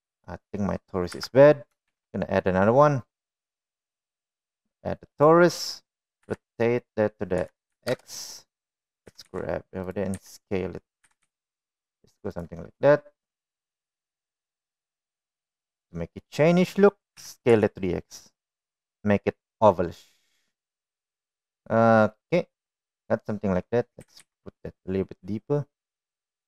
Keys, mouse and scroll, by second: 1.1 middle drag, 1.9 Delete, 2.6 shift+a, 7.0 r, 9.9 g, 11.0 s, 11.9 g, 13.7-15.9 middle drag, 16.4 middle click, 17.1 middle click, 18.0 s, 22.3-23.8 middle drag, 24.9 g.